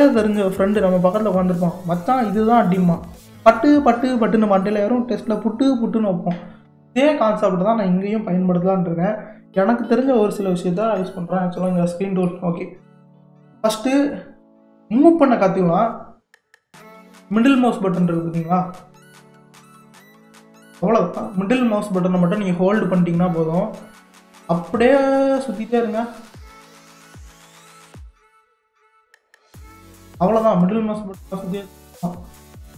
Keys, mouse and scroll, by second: 11.7-14.9 middle drag, 19.1-22.2 middle drag, 32.4-32.7 middle drag.